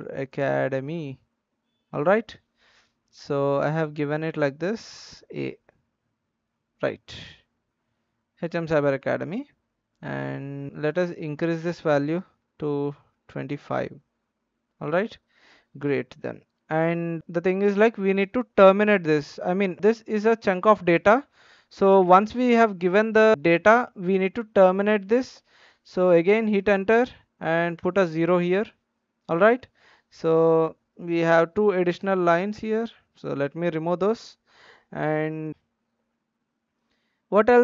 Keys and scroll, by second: 0.0-0.8 typing, 2.2-2.9 typing, 4.0-5.6 typing, 12.1 BackSpace, 12.3-13.3 BackSpace, 26.5 Return, 31.9 BackSpace, 32.5 BackSpace.